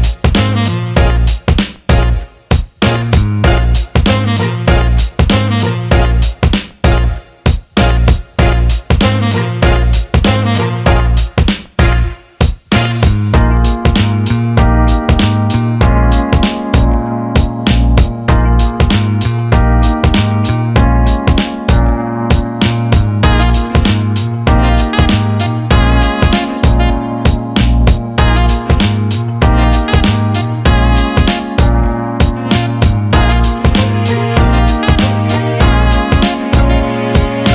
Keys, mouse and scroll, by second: 0.8 click, 1.7 click, 3.4-4.0 alt+middle drag, 4.3 shift+a, 7.7 click, 9.2 click, 9.5 alt+middle click, 10.4 click, 12.2 click, 13.1 alt+middle click, 14.4-15.5 drag, 15.6-18.6 alt+middle drag, 21.8 shift+a, 24.9-26.0 drag, 27.9 click, 29.3 alt+middle click, 30.0 click, 31.5 click, 31.7 alt+middle click, 32.5-33.8 drag, 34.6 click, 35.3-36.4 drag.